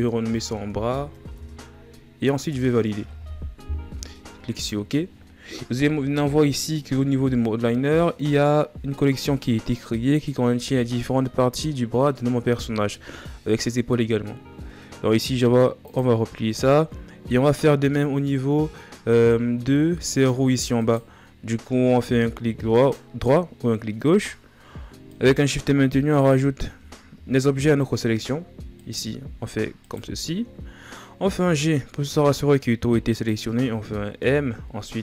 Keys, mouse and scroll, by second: 5.7-6.2 scroll up 3, 6.6 scroll up 8, 7.6-8.4 scroll down 11, 11.7-12.6 ctrl+scroll down 1, 12.6-14.1 shift+scroll up 2, 15.6-16.6 drag, 16.6-17.6 scroll down 4, 17.6-18.2 scroll down 4, 18.2-18.5 scroll up 3, 18.6 ctrl+scroll down 2, 19.5-20.1 shift+scroll down 4, 20.5-27.4 right drag, 27.4-28.5 shift+scroll up 4, 28.5-30.5 shift+right drag, 30.5-30.8 scroll down 4, 31.2 g.